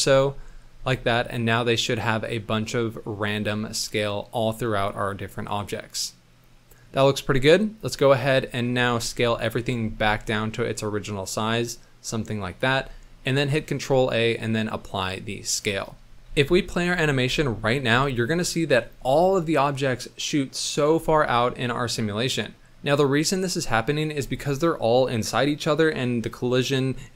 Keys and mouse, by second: 0.7 z, 1.3-3.2 drag, 3.8-6.8 drag, 8.9 KP_1, 9.9 s, 13.4 ctrl+a, 16.3 middle click, 16.3 z, 16.9 space, 17.9 space, 21.5-24.0 middle drag.